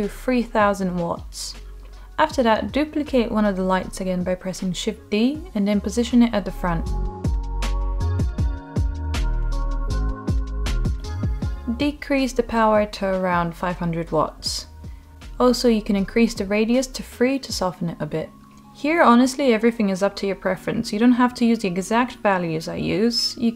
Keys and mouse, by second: 0.7 0, 0.9 0, 3.5-3.9 middle drag, 4.7 g, 5.4 shift+d, 6.9 click, 7.4-7.8 middle drag, 8.5 g, 9.6 click, 10.5-11.2 middle drag, 12.4-14.4 drag, 13.6 o, 15.4 middle click, 16.1 g, 18.0 click, 18.5 middle click, 19.7-22.7 drag.